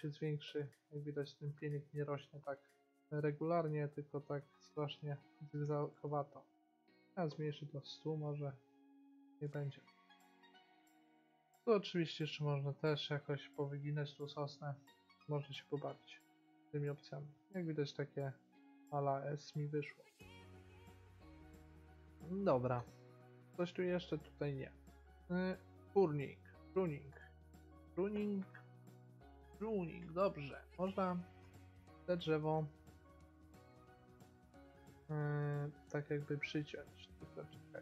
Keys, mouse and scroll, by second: 1.1-3.3 middle drag, 5.2-6.6 middle drag, 6.6-8.3 drag, 9.6-12.5 middle drag, 12.5-14.2 drag, 16.5-18.3 middle drag, 20.4 middle click, 20.8-22.5 middle drag, 24.6-26.4 drag, 31.1-32.7 drag, 31.7 middle click, 33.5 click, 35.6-37.8 drag.